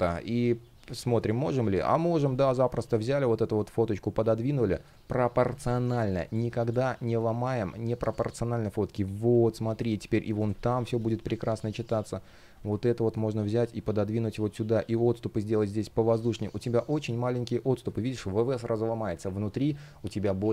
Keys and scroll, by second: 5.3 space, 10.0 Return, 14.6 shift+p, 15.8 space.